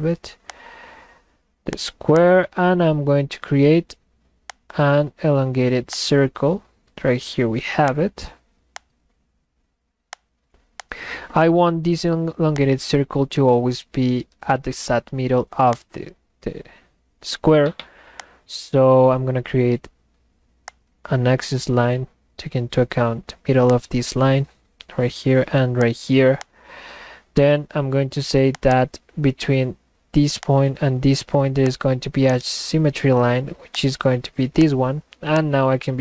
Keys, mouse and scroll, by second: 0.5 click, 1.7 click, 2.2 click, 4.5 click, 6.0 click, 7.9 click, 8.8 click, 10.1 click, 10.8 click, 12.6-15.2 drag, 15.8 click, 18.2 click, 20.6 click, 23.7 click, 25.8 click, 26.4 click, 28.5 click, 28.7 click, 30.4 click, 31.6 click, 32.3 right click, 33.8 click, 34.6 click, 35.4 click.